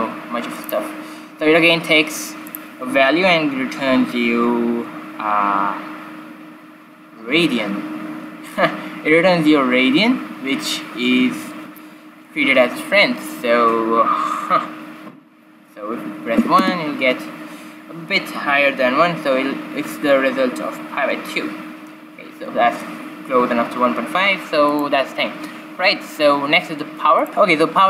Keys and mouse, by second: 2.4-4.4 drag, 24.5-26.5 drag, 25.7-26.1 typing.